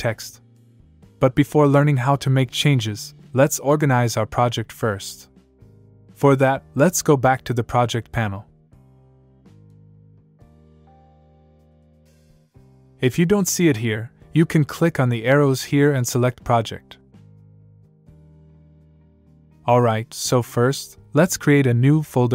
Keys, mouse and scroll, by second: 4.6 click, 7.7 click, 9.5 click, 14.1 click, 16.6 click, 19.7 click.